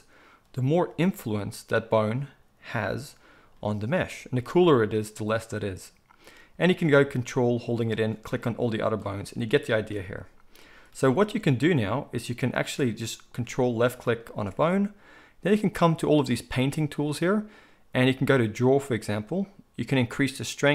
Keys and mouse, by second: 0.9 r, 7.9 ctrl+click, 8.0 ctrl+middle click, 8.8 ctrl+click, 8.9 ctrl+middle click, 9.5 ctrl+click, 9.6-11.9 ctrl+middle drag, 11.9 ctrl+click, 11.9-13.8 ctrl+middle drag, 13.8 ctrl+click, 13.9-15.7 ctrl+middle drag, 15.7-20.7 drag.